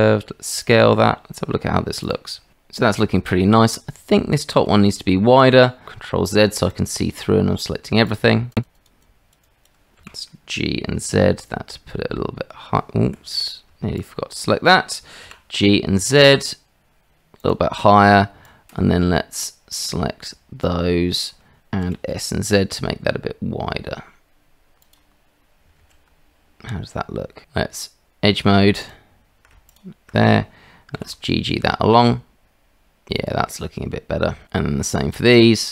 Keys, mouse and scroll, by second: 0.9 Tab, 2.0 click, 5.8 shift+z, 6.7 click, 8.2 shift+click, 8.7 shift+click, 9.3 shift+click, 10.0 g, 14.0 shift+click, 15.2 g, 18.5-19.9 drag, 21.8 s, 25.8 shift+z, 27.4 Tab, 29.7 alt+click, 30.9 g, 35.2 alt+click.